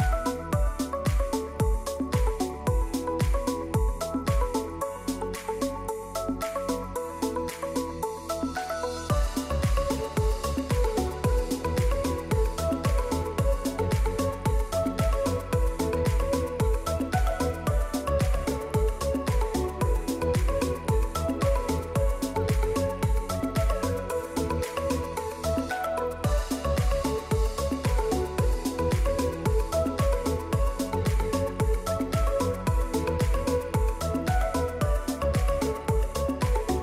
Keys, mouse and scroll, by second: 0.5 click, 2.6 right click, 3.8 click, 4.3 click, 5.7 click, 5.7-6.2 typing, 6.2 click, 6.4 click, 7.3 typing, 8.5 click, 8.8 typing, 8.9 click, 10.3-11.3 typing, 11.5 click, 12.9 Delete, 13.8 typing, 14.7 click, 15.4 click, 16.4 Return, 16.4 typing, 17.1 click, 18.4 click, 19.8 click, 20.6 click, 21.4 click, 22.1 click, 22.9 click, 23.8 click, 25.2 click, 29.6 Escape, 30.1 click, 30.7 click, 31.0-33.0 typing, 33.6 click.